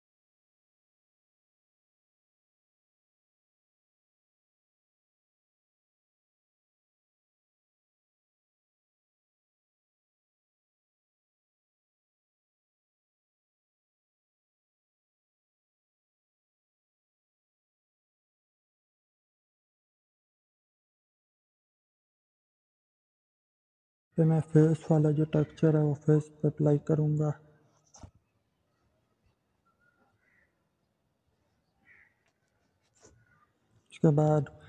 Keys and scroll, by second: 12.5 ctrl+c, 18.4 ctrl+v, 19.0 Return.